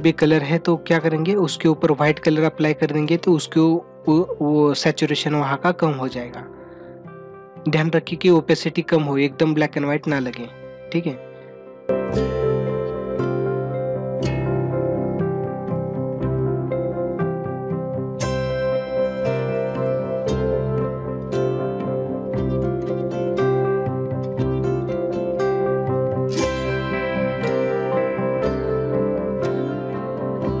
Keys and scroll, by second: 11.3 ctrl+=, 12.9 ctrl+=, 13.9 ctrl+=, 14.0 space, 18.4 space, 19.0 ctrl+=, 19.7 ctrl+=, 20.2 ctrl+=, 20.3 ctrl+alt+z, 20.4 ctrl+=, 20.8 ctrl+=, 21.6 space, 24.1 space, 25.0 ctrl+=, 25.4 ctrl+=, 25.7-29.2 typing, 26.5 ctrl+-, 27.5 ctrl+-, 27.8 ctrl+-.